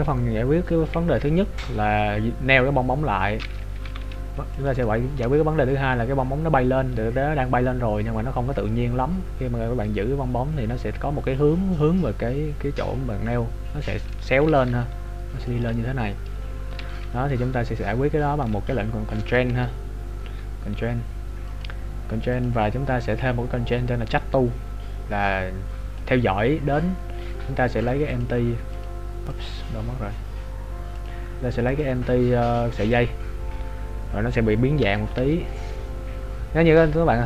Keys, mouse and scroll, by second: 1.4 scroll down 1, 1.7 scroll down 1, 3.8 g, 4.8 shift+middle click, 4.8 shift+scroll down 1, 10.6-13.8 scroll up 1, 14.6 click, 15.4-16.9 d, 16.9 right click, 18.4 d, 19.7 Tab, 20.2 Tab, 21.4 click, 27.8 click, 34.8 Tab, 35.2 Tab.